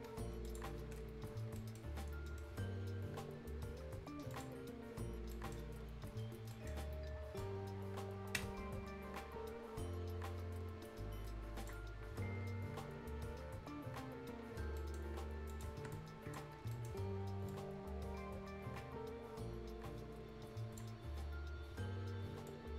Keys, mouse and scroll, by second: 0.3 shift+Escape, 1.1 shift+scroll down 1, 1.6 shift+right click, 1.9 shift+scroll down 1, 2.3 shift+middle click, 4.3 shift+click, 5.2 shift+scroll down 1, 5.3 shift+right click, 5.9-6.3 shift+scroll up 1, 6.3 shift+scroll down 1, 6.5 shift+right click, 6.8-7.4 shift+scroll up 1, 7.4-13.0 shift+drag, 13.0 scroll up 1, 14.8 right click, 15.5 scroll up 1, 15.5 click, 16.6 ctrl+shift+scroll down 1, 16.7 shift+right click, 17.5-21.9 shift+drag, 21.9-22.5 shift+scroll up 1, 22.5-22.7 shift+drag.